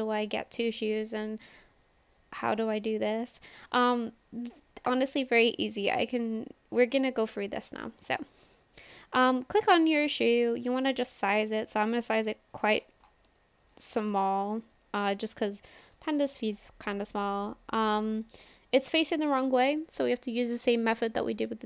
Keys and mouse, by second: 4.1 click, 4.9 click, 7.0-7.9 middle drag, 8.2-9.2 middle drag, 10.6 s, 12.6-13.1 drag, 13.4-13.8 shift+drag, 14.2-14.6 shift+drag, 14.7-15.3 drag, 15.3-16.0 middle drag, 16.3 s, 18.2 click, 18.5-20.1 middle drag.